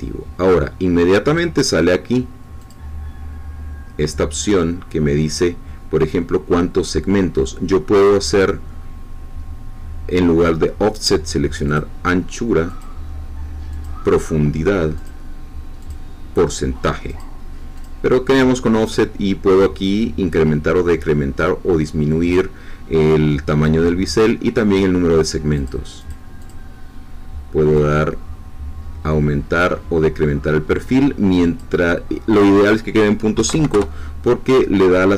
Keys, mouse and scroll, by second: 2.6 click, 7.9 click, 11.6 click, 12.7 click, 13.7 click, 14.9 click, 15.8 click, 17.0 click, 17.7 click, 19.6-23.1 drag, 25.5 click, 26.4 click, 27.7-31.7 drag, 32.3 click, 33.3 ., 33.5 5, 33.7 Return.